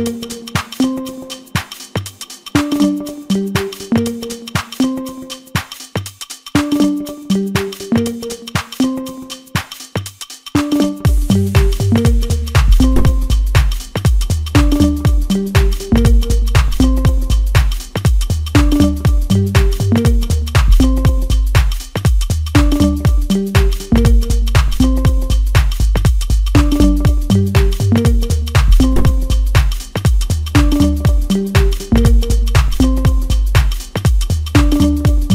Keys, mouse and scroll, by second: 0.6 scroll up 2, 1.3 scroll down 2, 2.6 KP_7, 3.3-4.3 scroll down 3, 4.3-4.6 scroll up 2, 7.1-10.2 drag, 17.7-18.1 scroll down 1, 18.1-19.6 middle drag, 19.6-22.3 drag, 22.3-23.4 scroll down 1, 23.4-24.4 scroll down 6, 24.6-26.5 scroll down 2, 26.5-28.8 drag, 28.8 scroll down 1, 29.1-31.5 middle drag, 31.5 click, 33.0 scroll up 1, 33.3 s, 34.9 KP_7.